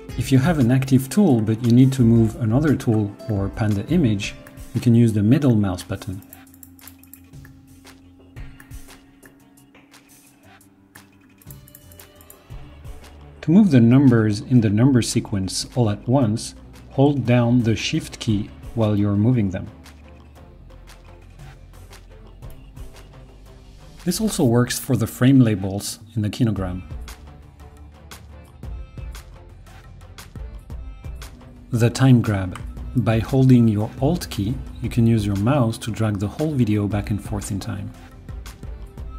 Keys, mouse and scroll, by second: 7.3-11.0 middle drag, 18.1-22.6 shift+drag, 33.7-39.1 alt+drag.